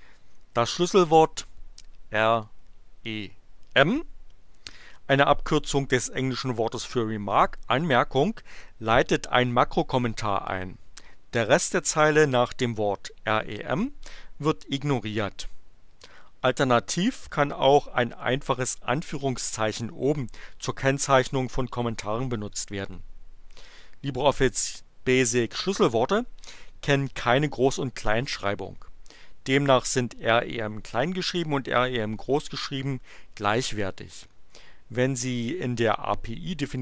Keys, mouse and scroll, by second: 2.4 click.